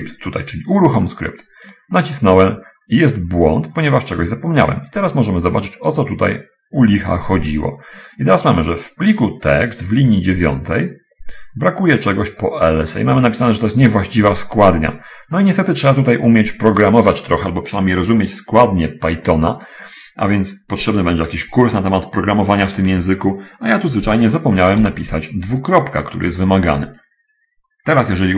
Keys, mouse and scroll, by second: 2.1 click, 25.2 shift+;.